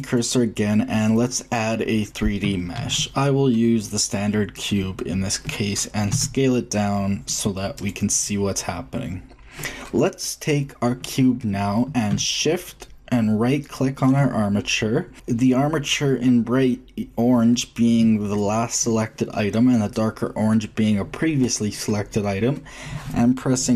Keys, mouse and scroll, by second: 2.7 shift+a, 6.1 s, 9.0-11.8 middle drag, 13.6-14.4 shift+drag, 14.4 shift+middle click.